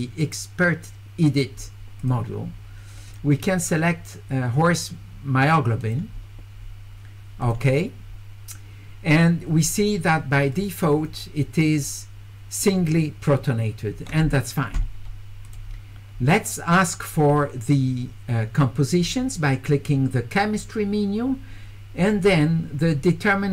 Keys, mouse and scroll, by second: 2.0 click, 3.1 click, 5.8 click, 7.4 click, 10.5 click, 15.4 click.